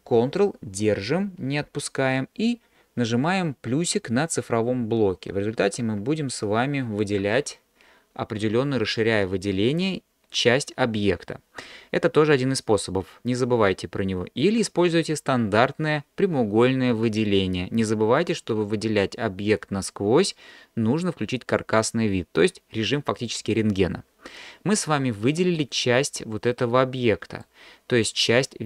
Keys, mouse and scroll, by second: 5.3 ctrl+KP_Add, 5.9 ctrl+KP_Add, 6.5 ctrl+KP_Add, 25.2-27.5 middle drag.